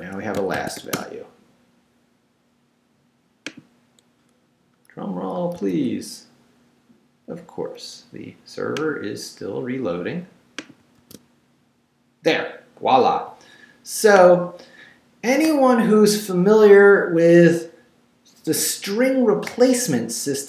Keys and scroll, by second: 0.0 Escape, 0.3-1.3 typing, 5.6 super+r, 11.0 super+r.